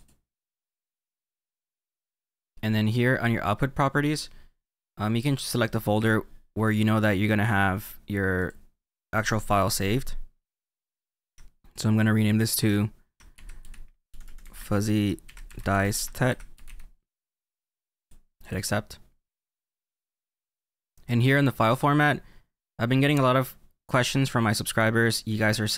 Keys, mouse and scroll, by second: 1.4-4.9 scroll down 2, 5.5 click.